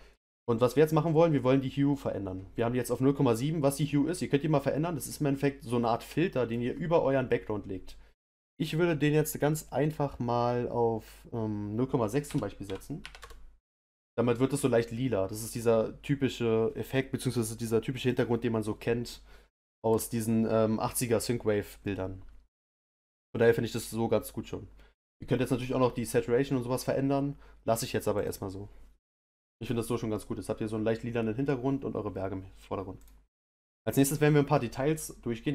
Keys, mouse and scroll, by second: 0.3 click.